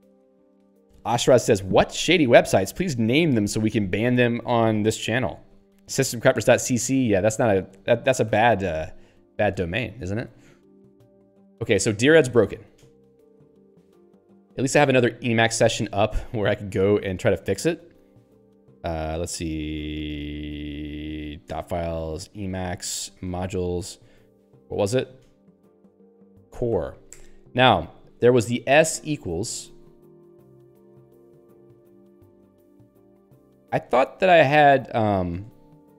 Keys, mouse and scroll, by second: 14.3 e, 15.4 click, 16.0 ctrl+f, 17.2 alt+h, 19.1-23.3 typing, 19.5 Tab, 23.5 Tab, 26.7 o, 27.3 Return, 28.2 /, 28.5 -, 28.9 BackSpace, 29.5 ctrl+s, 30.2-31.3 typing, 32.0 Return, 35.2 alt+<.